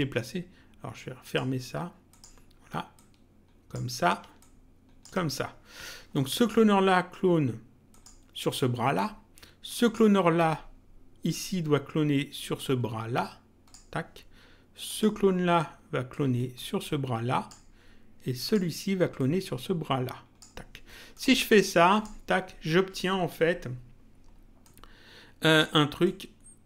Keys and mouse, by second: 1.2 click, 2.9 ctrl+click, 4.4 ctrl+click, 6.1 click, 7.8 click, 9.8 click, 12.5 click, 14.8 click, 16.0 click, 18.4 click, 21.1 click, 24.6 click, 26.0 click.